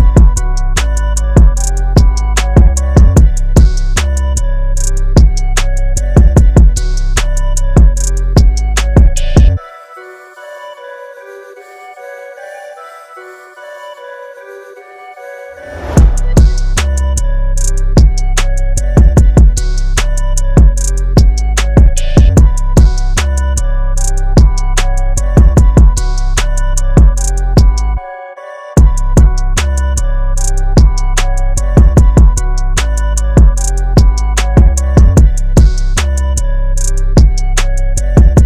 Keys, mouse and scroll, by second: 0.4 click, 1.9 KP_0, 3.2 click, 9.3 click, 16.3 click, 20.3 click, 20.9 space, 21.0 click, 21.3 space, 22.3 click, 29.2 click, 32.7-33.9 scroll up 1, 34.6 scroll up 1, 37.1-38.4 scroll up 1.